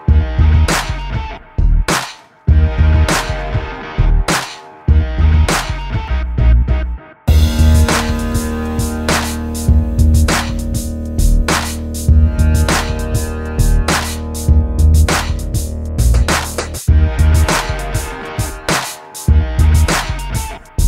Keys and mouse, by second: 0.9 Tab, 2.0 middle click, 3.1 Tab, 3.5 a, 3.8 Tab, 4.2 alt+h, 4.9 a, 5.1 ctrl+s, 5.8 middle click, 6.1 KP_0, 6.7 middle click, 10.0 middle click, 10.6 KP_0, 14.1 Escape, 14.4 KP_0, 15.2 click, 15.4 Tab, 15.7 ctrl+r, 16.2 a, 17.3 a, 17.6 click, 18.4 click, 19.0 alt+s, 20.0 click, 20.2 alt+s.